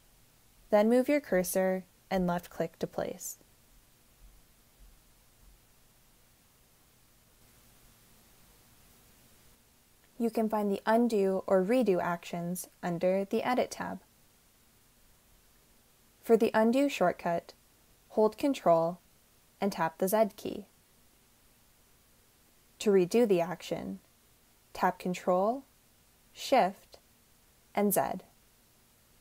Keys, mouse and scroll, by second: 1.5-3.8 drag, 18.8 ctrl+z, 25.2 ctrl+shift+z.